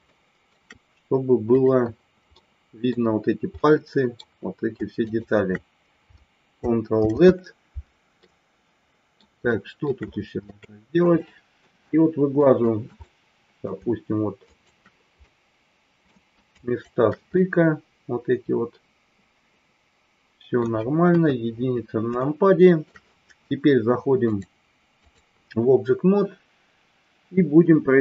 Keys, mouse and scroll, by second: 0.1 shift+middle click, 1.5 click, 2.4 middle click, 3.6 middle click, 5.0 shift+click, 7.0 ctrl+z, 8.2-9.2 middle drag, 9.5 shift+middle click, 10.5 shift+middle click, 11.2 middle click, 12.4 shift+click, 13.0 middle click, 14.4 shift+click, 15.2 middle click, 16.5 shift+click, 17.4-20.6 middle drag, 21.0 KP_1, 22.2 shift+middle click, 24.2-25.2 drag.